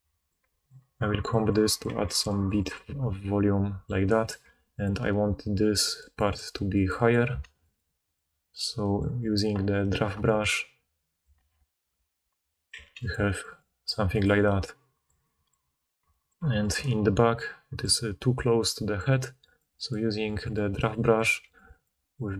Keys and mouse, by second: 1.8 f, 4.4 f, 4.8-5.9 middle drag, 7.4 ctrl+z, 11.3 ctrl+z, 11.5 ctrl+z, 12.2 ctrl+shift+z, 12.7 f, 13.1 middle click, 15.1-16.6 drag, 16.3 f, 16.6-19.4 middle drag, 19.4-21.5 drag, 21.2 f, 21.5 middle click, 21.6-22.3 drag.